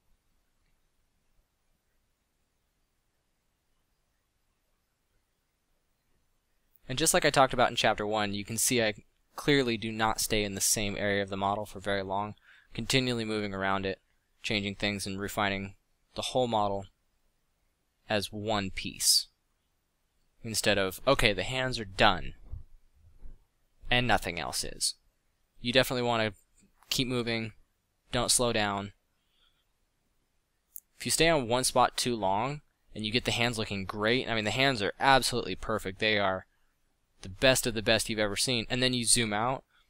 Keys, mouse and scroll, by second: 0.4 f, 5.1 f, 21.8 f, 35.4 middle click, 36.3 f, 37.9 f.